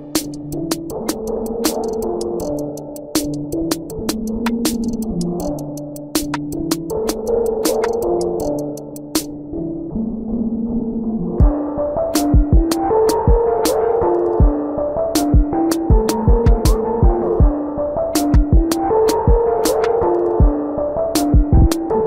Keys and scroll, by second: 13.0 ctrl+=, 13.7 space.